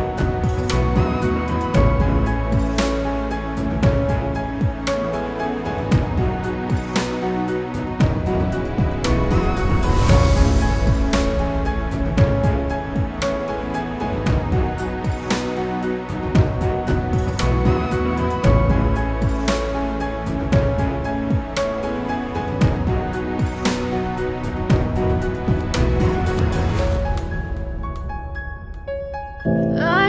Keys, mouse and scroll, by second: 0.2 F4, 0.7 click, 3.0 click, 3.3 double click, 4.3 click, 5.6 click, 5.9 double click, 6.7 click, 7.1 double click, 9.9 click, 10.3 double click, 10.8 click, 13.1 click, 13.4 double click, 14.2 click, 15.2 double click, 18.0 click, 20.2 scroll down 1, 20.6 click, 21.8 click, 24.2 click, 24.6 double click, 28.4 click, 29.5 click.